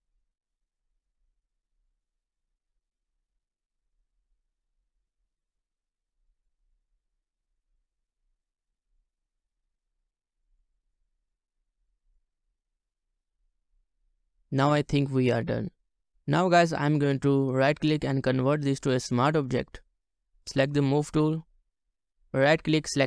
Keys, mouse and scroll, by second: 9.8 double click, 9.8 scroll down 1, 10.8 double click, 12.4 double click, 12.4 ctrl+alt+scroll down 1, 14.2 scroll down 1, 14.9-15.3 ctrl+scroll down 1, 15.5-16.2 ctrl+scroll, 16.2-17.5 scroll up 1, 17.5 right click, 21.1-21.5 ctrl+scroll up 1, 22.1 right click.